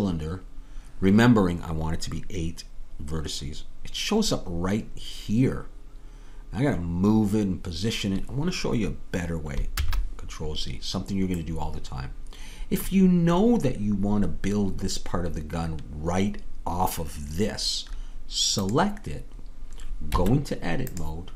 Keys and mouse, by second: 9.8 ctrl+z, 11.5 ctrl+z, 19.1-21.0 drag, 20.2 Tab.